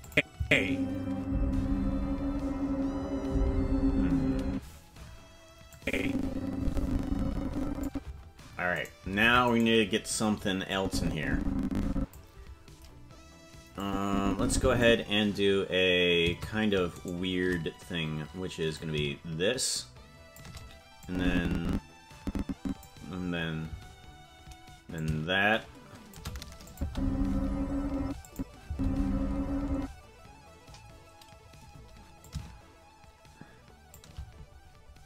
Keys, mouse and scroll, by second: 0.0 click, 0.3 space, 4.4 space, 5.7-7.9 drag, 8.9 right click, 9.2 ctrl+Tab, 9.6-10.7 right drag, 10.7-12.2 drag, 13.8-14.8 drag, 17.1 shift+right click, 18.8-20.4 shift+drag, 21.0-22.9 drag, 25.0-26.2 shift+drag, 26.7 click, 26.8 space, 28.0 space, 28.2 click, 28.6 space, 29.7 space, 32.2-34.0 shift+drag.